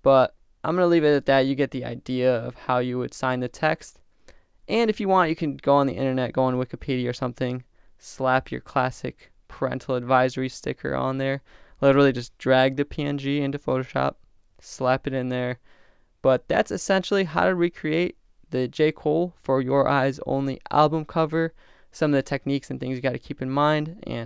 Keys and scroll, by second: 1.1 shift+Return, 2.1 Return, 17.3 Left.